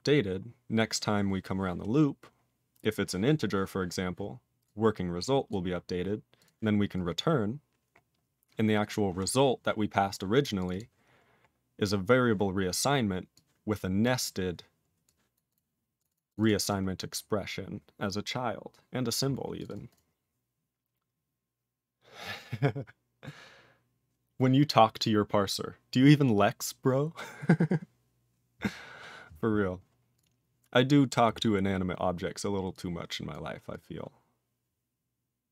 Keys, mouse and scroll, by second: 2.0-2.8 scroll up 9, 3.9 scroll up 2, 4.6 click, 5.5 click, 6.4 click, 6.4 click, 6.9 click, 7.1 click, 8.0 scroll up 2, 9.0-10.0 scroll up 4, 10.0 scroll up 5, 10.6 click, 10.6 click, 10.7 double click, 10.7 double click, 11.1-12.1 scroll down 18, 13.3 click, 14.0 click, 14.1 click, 14.2 click, 15.0 click, 15.3 click, 15.5 click, 15.5 click, 16.0 click, 16.0 click, 16.1 double click, 16.1 double click, 16.3 click, 16.3 click, 16.4 double click, 16.4 double click, 16.6 click, 16.7 click, 16.8-17.8 scroll up 6, 19.6 click, 19.6 double click, 19.7 double click, 19.9 click, 19.9 click, 30.1 click, 30.2 click, 31.1 click, 31.1 click, 31.4-32.0 scroll down 4, 32.7 click, 33.3 click, 33.7 click.